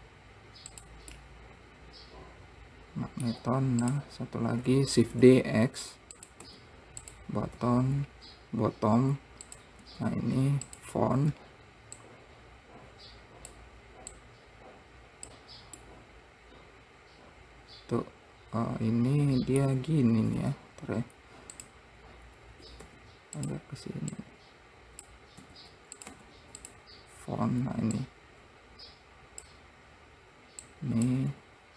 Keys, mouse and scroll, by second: 1.6-3.8 middle drag, 3.8 `, 5.4 shift+d, 6.8 `, 8.0 r, 10.2 `, 12.4 click, 14.5 click, 16.3-19.3 middle drag, 20.9 `, 23.3 r, 24.6 click, 25.9 s, 26.6 `, 28.4 click, 31.1 click.